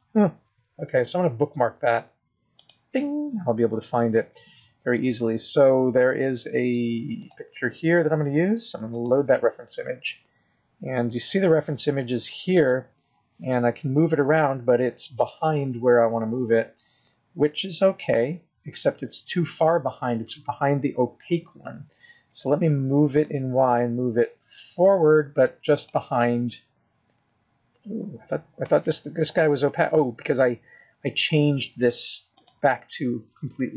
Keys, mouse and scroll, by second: 12.2-12.8 scroll down 6, 12.8 scroll up 2, 14.4 click, 15.4 g, 19.7 scroll down 1, 19.9 middle click, 24.5 g, 28.1 middle click, 28.1 scroll down 1, 30.4 middle click, 31.2 KP_0.